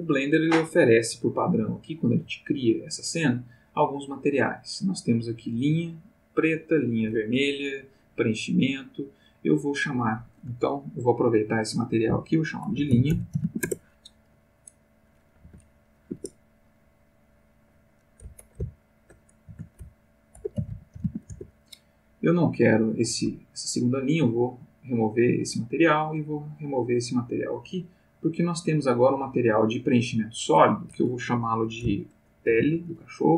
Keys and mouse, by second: 9.5 click, 12.6-13.4 typing, 13.6 shift+Return, 15.4 F2, 16.1 Escape, 17.2 click, 19.5-21.0 typing, 21.3 shift+Return, 22.7 click, 24.4 click, 26.0 click, 26.9 click, 29.9 click, 32.5 shift+p.